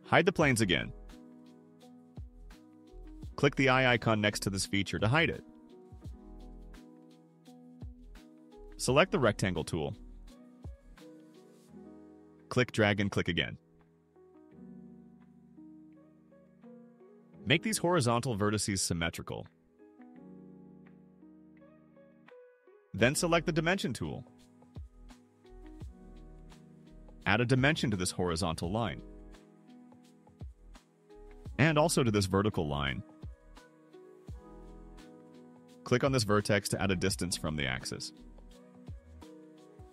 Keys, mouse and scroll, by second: 0.9 click, 5.1 click, 6.1-6.5 scroll up 4, 11.0 click, 12.1 click, 13.6 click, 14.7 right click, 17.2 click, 18.1 click, 19.0 click, 20.8 click, 25.4 click, 26.8 click, 27.6 click, 28.2 1, 28.7 0, 28.9 0, 30.9 click, 32.3 click, 33.1 3, 33.4 5, 36.7 click.